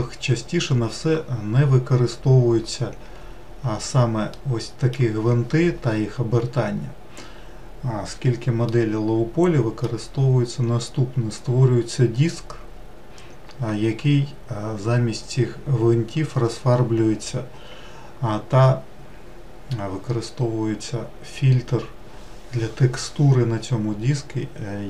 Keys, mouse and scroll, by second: 4.1-24.8 middle drag.